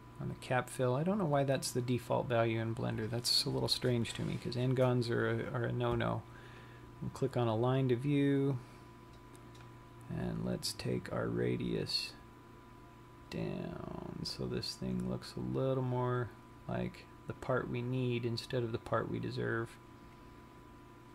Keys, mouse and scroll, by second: 7.0 click, 9.4 click, 11.2 click.